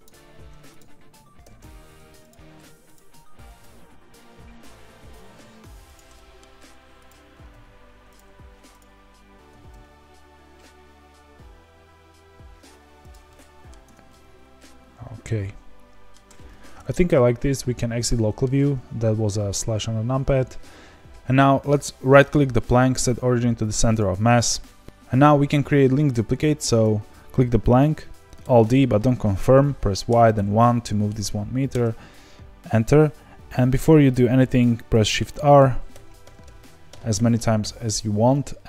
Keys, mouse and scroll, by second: 0.3 1, 0.7 click, 1.4 g, 2.9 click, 3.4 g, 6.1 middle click, 7.0 click, 7.3 g, 8.7 click, 9.5 g, 13.2 middle click, 13.8 Tab, 14.0-16.1 middle drag, 16.1-16.7 scroll down 1, 16.7 KP_Divide, 17.4-18.1 scroll down 1, 18.1-23.9 shift+middle drag, 23.9-24.8 right drag, 24.8 click, 26.8 click, 28.4 alt+d, 35.9-37.6 typing.